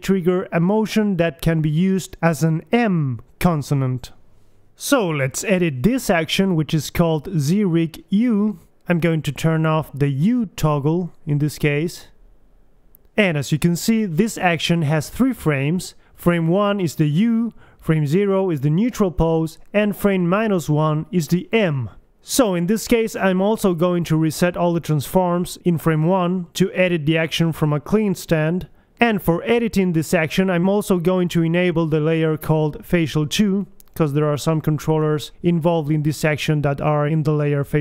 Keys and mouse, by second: 1.2-4.8 middle drag, 4.8 alt+g, 5.4 KP_1, 6.2 middle click, 7.3 click, 8.4 BackSpace, 8.7 BackSpace, 12.3-13.3 drag, 15.4 Right, 16.2 Left, 16.7 Right, 18.5 Left, 19.8 Left, 21.0 Right, 21.7 Right, 22.3 KP_1, 24.8 KP_1, 27.4 middle click, 29.0-30.2 right drag, 30.2 KP_1, 32.0 a, 32.3 a, 33.4 alt+g, 33.7 alt+r, 34.0 alt+s, 34.2 a, 34.9 click, 35.1 g, 36.3 click, 36.5 a, 36.7 alt+g, 36.7 a, 36.8 alt+r, 37.3 alt+a, 37.4 alt+h, 37.7 alt+g.